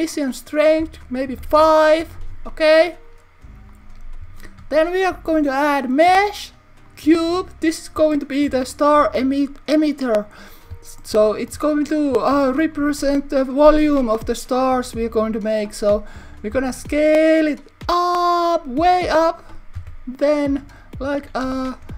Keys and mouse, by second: 0.2-2.3 drag, 3.7 click, 4.6 shift+a, 11.2 shift+middle click, 19.0 click, 19.8 Tab, 20.4 click, 21.5 z.